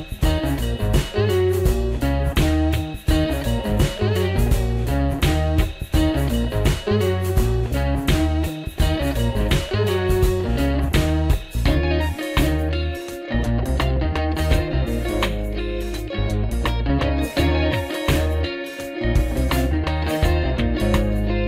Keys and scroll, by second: 0.0-0.6 typing, 1.7 super+Down, 2.4-3.7 typing, 4.4 Down, 5.1 Down, 5.6 Up, 7.4 ctrl+-, 7.9 ctrl+-, 8.1 ctrl+-, 8.8 Up, 9.3 Down, 11.0 shift+super+Right, 12.0 super+Left, 12.5 shift+super+Down, 13.4 super+Return, 16.8 super+f, 18.9 super+Down, 19.5 shift+super+Right.